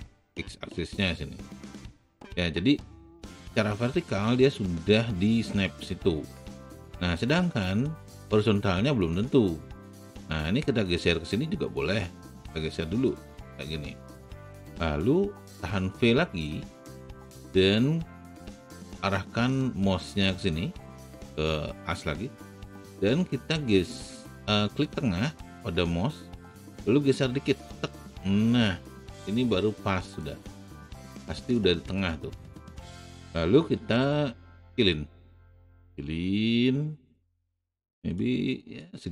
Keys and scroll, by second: 16.6 v, 33.8 r.